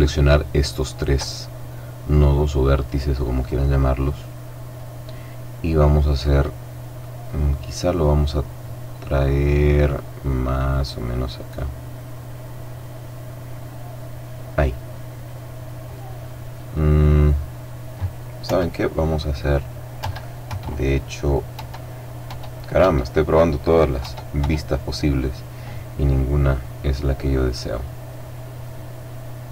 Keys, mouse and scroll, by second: 0.8 right click, 1.5-2.6 middle drag, 2.6-3.1 scroll up 1, 3.1 middle click, 4.1-6.7 drag, 10.7-11.1 scroll up 1, 11.1 middle click, 11.5 middle click, 14.8 click, 16.4 click, 18.3 KP_1, 19.9 KP_2, 20.4 KP_3, 21.4 KP_4, 22.2 KP_5, 22.7 KP_6, 23.9 KP_8, 25.1-29.1 drag.